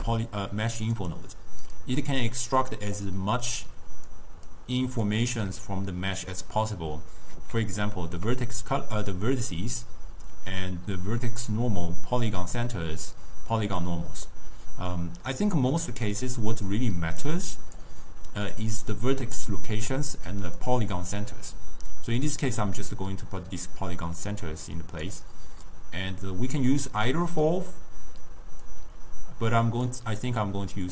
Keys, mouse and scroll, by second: 1.9 click, 3.5 click, 4.6 click, 5.4 scroll up 1, 5.5-7.8 middle drag, 7.8-10.9 ctrl+scroll up 1, 14.4 scroll down 1, 14.4-16.3 middle drag, 16.3-17.5 drag, 18.8 drag, 20.7 drag, 24.4 click, 28.8 click.